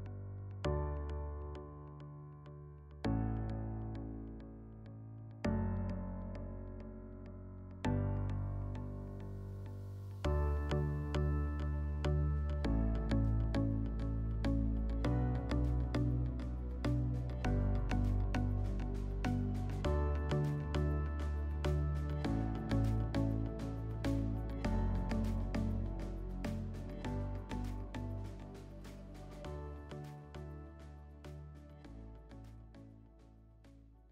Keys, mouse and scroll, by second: 0.9 shift+click, 3.6 shift+click, 7.0 shift+click, 7.9 click, 9.4 click, 10.4 click, 11.6 click, 13.6 alt+middle click, 14.3 middle click, 15.7-16.0 scroll.